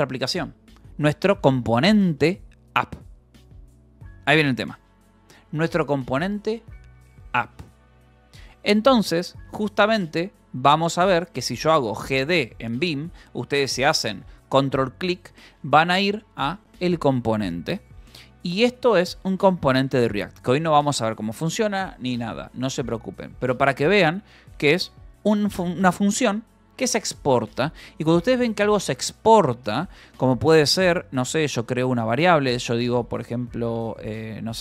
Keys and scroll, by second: 0.0-1.7 typing, 0.4 Escape, 8.5-10.1 typing, 11.7-12.6 typing, 16.5-19.7 typing, 19.1 Escape, 20.8 k, 23.2 Escape, 24.7 k, 25.2 j, 25.9 k, 27.1 shift+v, 27.7 Escape, 28.9 Escape, 30.2-32.5 typing, 31.1 Return, 34.2 Return, 34.4-34.6 typing.